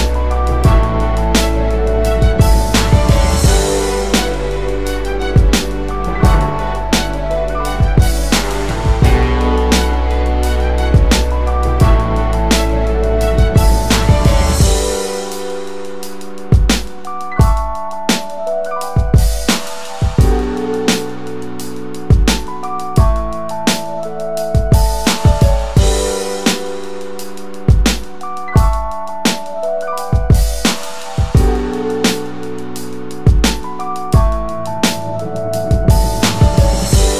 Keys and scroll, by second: 2.6 3, 3.6 Tab, 4.9 typing, 5.9 Return, 11.3 space, 16.0 1, 16.7 Tab, 17.1 1, 23.8 space, 24.3 space, 29.0-35.6 space.